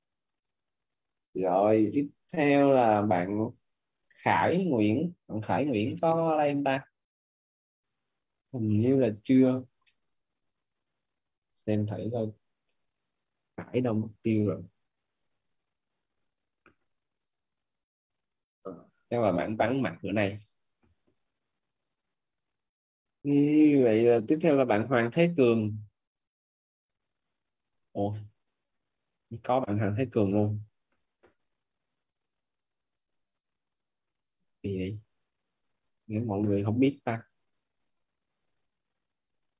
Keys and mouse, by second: 9.9 click, 14.1 click, 18.2 click, 22.3 click, 24.4 click, 32.1 click, 37.7 click.